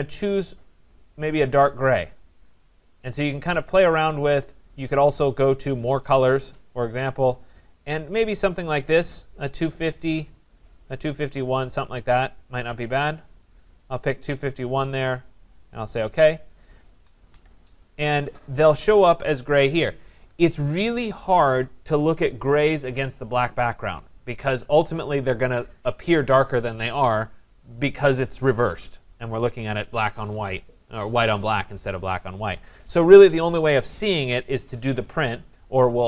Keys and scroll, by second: 17.3 Escape.